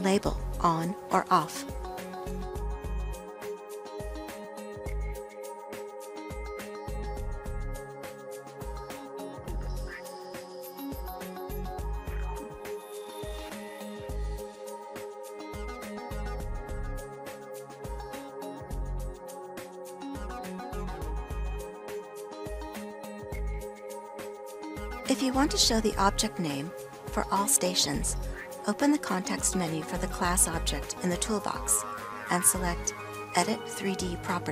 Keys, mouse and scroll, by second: 31.8 click.